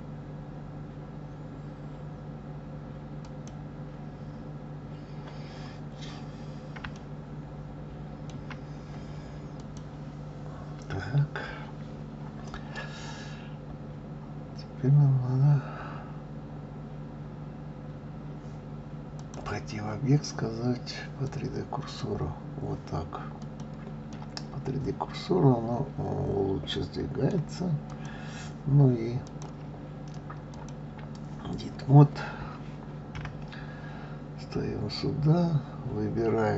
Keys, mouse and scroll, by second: 6.1-6.9 scroll up 3, 6.9-9.6 shift+middle drag, 9.6 click, 19.1-22.2 drag, 23.4 click, 24.1-27.1 middle drag, 27.9 click, 29.2-32.2 drag, 33.1 KP_1.